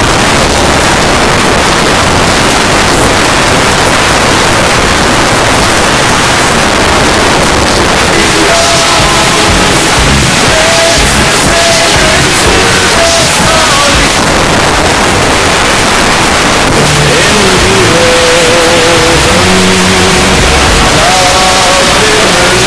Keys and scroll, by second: 1.3 g, 1.4-2.1 Down, 2.4 Down, 2.5 Return, 14.1 Page_Down.